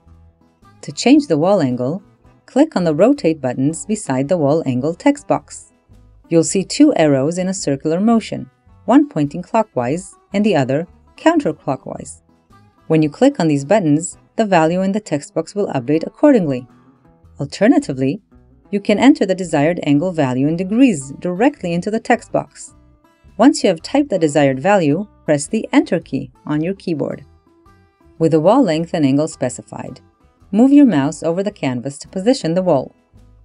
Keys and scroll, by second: 25.0 Return.